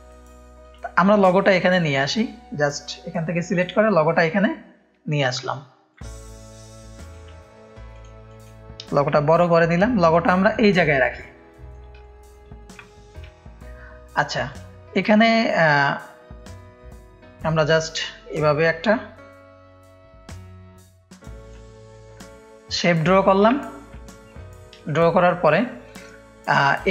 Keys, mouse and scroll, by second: 0.2 ctrl+space, 0.2 ctrl+click, 1.6-4.3 drag, 5.9-7.1 alt+shift+drag, 7.9 click, 8.2 click, 9.0 space, 9.1 click, 9.8-10.5 drag, 10.7 click, 11.2 ctrl+space, 11.2 ctrl+click, 12.0 click, 12.0 space, 12.8 click, 12.8 space, 16.0-21.5 drag, 22.3 F1, 23.6 click, 23.6 space, 23.9 click, 24.2 click, 24.7 click, 24.9 space, 25.1 click, 25.6 click, 25.6 space.